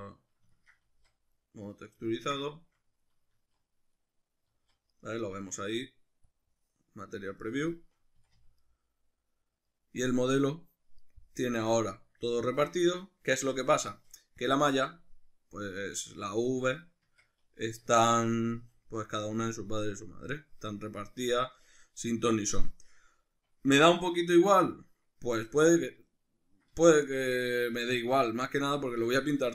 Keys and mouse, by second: 0.8 z, 3.4 z, 4.5 z, 6.3-7.4 drag, 7.4-14.4 ctrl+middle drag, 8.2 a, 14.4 click, 15.8 click, 16.7 right click, 17.1 Tab, 17.7 a, 19.0-29.5 shift+middle drag.